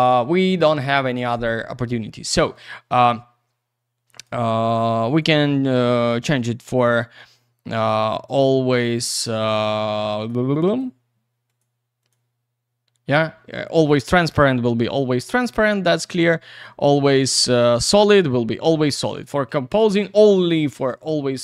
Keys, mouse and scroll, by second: 2.5 click, 4.1 click, 5.1 click, 8.7 click, 10.2 click, 10.6 click, 10.8 double click, 11.4 click, 12.0 click, 15.0 click, 15.6 click, 16.5 click, 17.6 click, 19.1 click, 19.7 click, 20.9 click, 21.3 click.